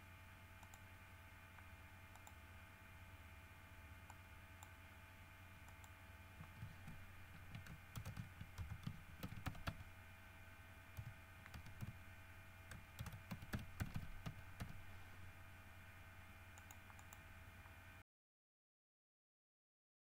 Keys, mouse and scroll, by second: 0.9 middle click, 2.4 middle click, 4.3 middle click, 5.9 click, 8.2 shift+-, 8.8 shift+BackSpace, 9.7 shift+r, 9.9 shift+e, 11.2 n, 11.7 c, 12.0 h, 13.2-14.8 typing, 16.8 click, 19.0 middle click.